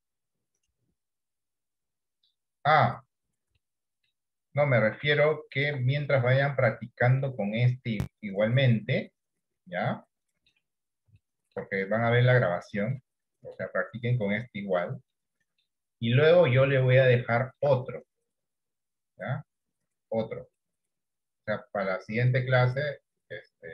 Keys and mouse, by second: 3.8 middle click, 5.1 right click, 5.1 d, 5.7 d, 6.4 middle click, 7.2 middle click, 8.3-10.6 middle drag, 11.3 shift+middle click, 12.3 middle click, 13.6 middle click, 15.3 middle click, 16.8 shift+middle click.